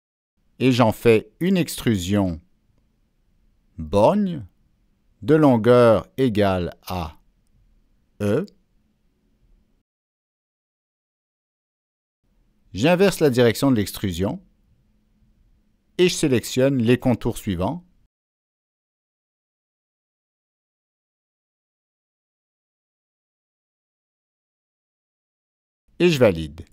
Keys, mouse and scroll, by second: 0.9 click, 3.0 click, 3.7 scroll down 1, 10.0 Down, 10.1 Left, 10.5 Return, 13.7 Return, 15.4 click, 16.4 middle click, 16.4-17.0 scroll down 2, 16.8 middle click, 18.0 click, 18.8 click, 19.8 click, 21.5 click, 22.3 click, 22.6 scroll up 1, 23.0-23.3 scroll down 1, 24.3 click, 25.7 click, 26.4-26.7 scroll up 2.